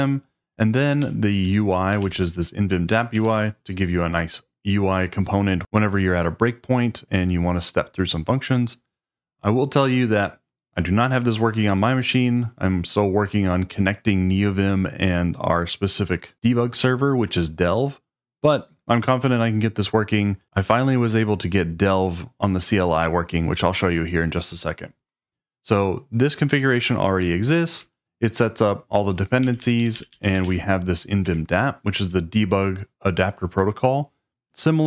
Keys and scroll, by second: 1.0-1.4 k, 2.0 shift+v, 2.9 Escape, 3.1-3.6 typing, 29.2-30.9 typing, 31.2 Escape.